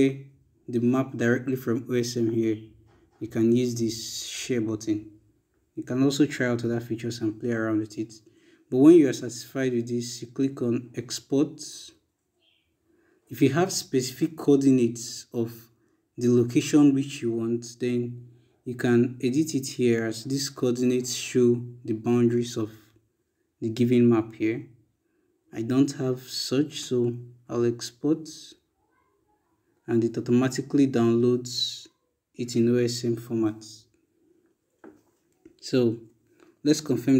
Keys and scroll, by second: 36.3 e.